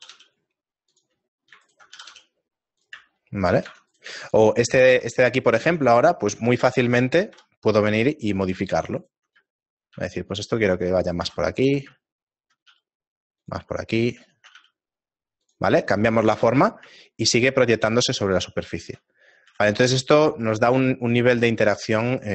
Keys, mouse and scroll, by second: 0.0 g, 1.7 alt+right click, 1.9 g, 3.1 shift+middle click, 4.2 Tab, 4.2 right click, 5.0 shift+middle click, 5.8 Tab, 6.5 shift+middle click, 7.6 KP_7, 8.3 scroll up 2, 9.0 right click, 9.0-10.9 scroll up 3, 10.9 ctrl+right click, 10.9 g, 11.6 a, 11.7 right click, 12.1 ctrl+right click, 14.1 right click, 14.1 g, 14.6 shift+right click, 14.6 g, 15.9 middle click, 17.0 Tab, 17.0-18.1 scroll down 4, 18.1 shift+middle click, 19.1 scroll down 1, 19.9 shift+middle click, 19.9-20.7 scroll down 1, 19.9 a, 20.7 shift+middle click.